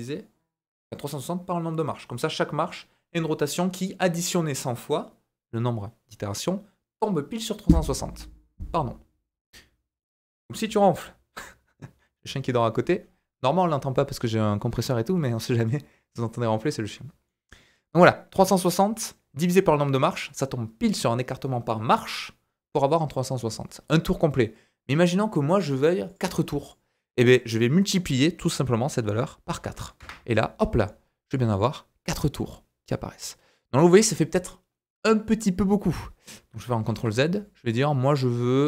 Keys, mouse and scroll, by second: 17.2-20.3 middle drag, 26.1-29.2 drag, 31.3-33.3 middle drag, 36.8 ctrl+z, 37.7 click.